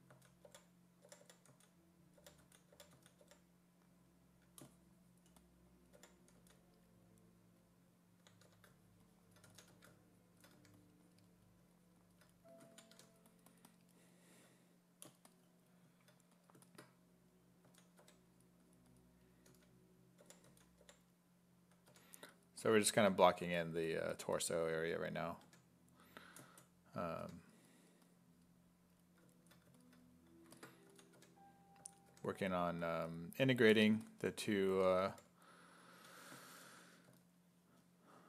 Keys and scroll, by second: 0.1-3.7 typing, 6.0 5, 6.4 s, 8.5-10.6 typing, 12.7 ctrl+z, 13.0 1, 17.7 s, 18.0 1, 19.5-21.9 typing, 23.1 1, 25.5 1, 27.3 1, 30.9 s, 31.2 1, 31.8 s, 32.1 1, 34.8 s, 35.1 5, 36.0 s, 37.1 s.